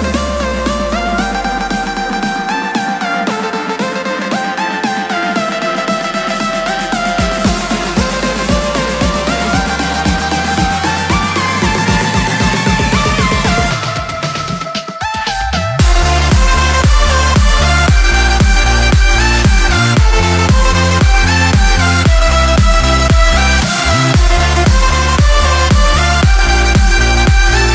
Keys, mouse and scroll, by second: 17.6 click, 23.1 click, 25.1-27.4 drag.